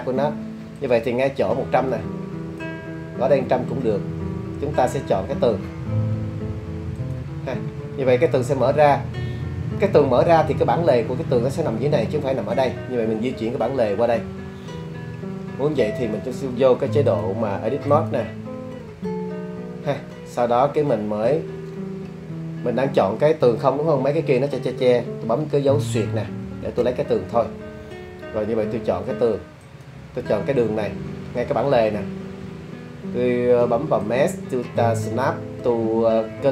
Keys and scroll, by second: 26.4 /.